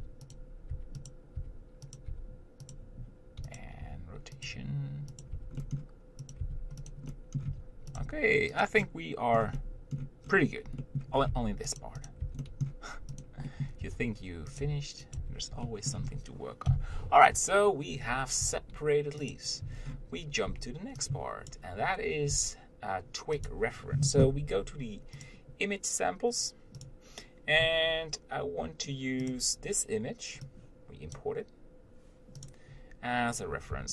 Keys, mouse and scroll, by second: 0.2 g, 1.0 Tab, 1.3 click, 1.6 Tab, 2.2 click, 2.3 g, 3.8 click, 4.1 r, 4.7 g, 5.6 Tab, 5.8 middle click, 6.6 click, 6.7 Tab, 7.1 click, 7.4 middle click, 7.7 r, 8.2 g, 9.1 middle click, 9.8 middle click, 10.5-11.0 scroll down 1, 11.0 middle click, 11.4 scroll up 2, 11.5 Tab, 12.1 click, 12.3 click, 12.4 Tab, 12.7 middle click, 13.5 click, 13.7 middle click, 14.1 r, 14.8 g, 15.4 Tab, 15.9-16.9 middle drag, 16.9 KP_7, 18.7 g, 20.0-20.7 scroll down 1, 20.7-21.8 scroll down 1, 21.8 b, 22.5 g, 32.7 click.